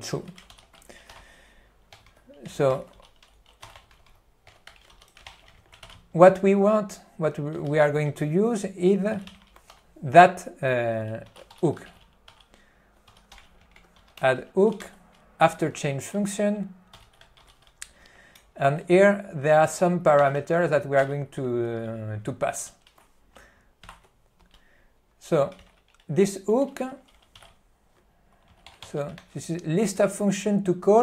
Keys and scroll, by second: 0.6 ctrl+g, 1.3-6.2 typing, 5.7 alt+w, 7.7 BackSpace, 9.4 ., 9.8 F3, 10.8-12.4 typing, 17.3 e, 17.5 q, 18.5 ., 21.3 b, 22.7 q, 24.1 ctrl+d, 25.7 ctrl+n, 26.9 ctrl+g, 28.5 n, 29.3 ctrl+p.